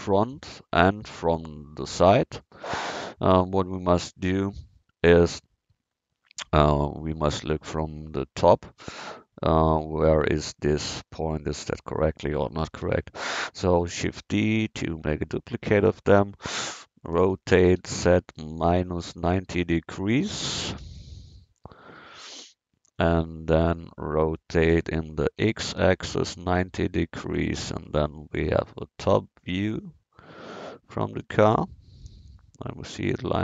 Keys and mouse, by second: 5.2 KP_1, 12.9 shift+d, 14.8 click, 17.8 r, 23.0-25.1 drag, 25.4 r, 27.8 middle drag, 28.2 middle drag, 29.6-31.2 right drag.